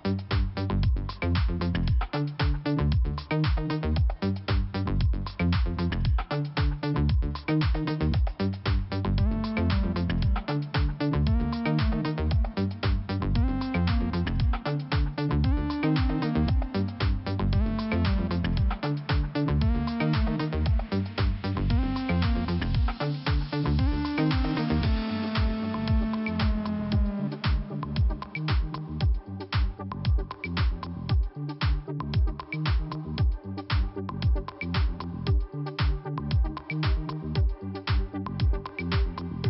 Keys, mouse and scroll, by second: 1.2 click, 2.6 click, 4.1 click, 6.1 click, 6.6 click, 8.3 click, 9.4-9.9 scroll down 2, 12.0 click, 12.6-13.0 scroll down 2, 13.6 click, 16.5 Return, 18.3 click, 18.4 click, 19.4 click, 19.5 click, 20.4 click, 21.7 click, 22.8 click, 24.4 scroll up 1, 25.5 click, 26.7 click, 27.4 click, 27.4 click, 28.8 click, 28.9 click, 32.1 click, 33.6 scroll up 1, 34.2 click, 37.5 click, 37.6 click, 38.3 scroll up 1, 39.2 click.